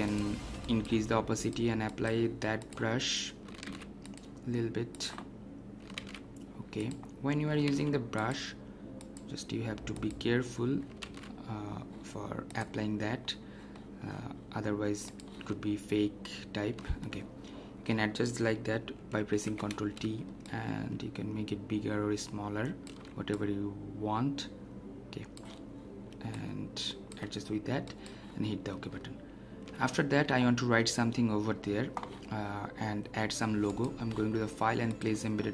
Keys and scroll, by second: 3.6 ctrl+alt+z, 11.0 ctrl+alt+z, 19.2 ctrl+t.